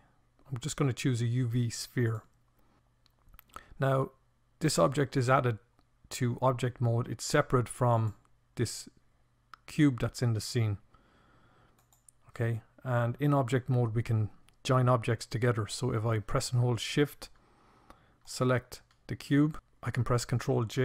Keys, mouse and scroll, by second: 20.1 ctrl+j.